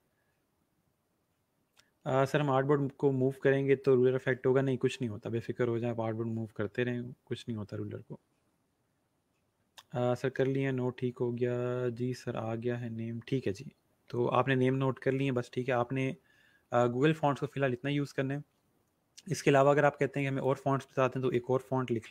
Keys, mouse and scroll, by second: 20.1 click, 21.6-22.1 typing.